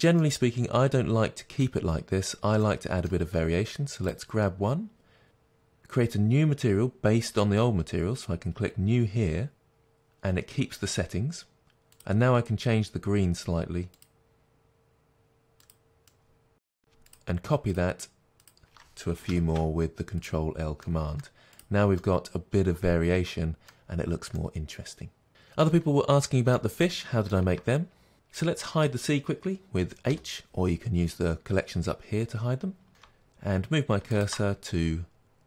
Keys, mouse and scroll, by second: 3.3-4.2 scroll up 2, 4.2 click, 9.8 click, 11.9 click, 16.0 middle click, 16.3 click, 17.1 shift+click, 17.7 shift+click, 18.4 shift+click, 19.3 ctrl+l, 21.0 middle click, 21.5 click, 22.0-28.4 middle drag, 23.9-24.4 scroll down 2, 28.4 click, 30.1 h, 33.0-34.2 shift+middle drag, 34.2 shift+right click.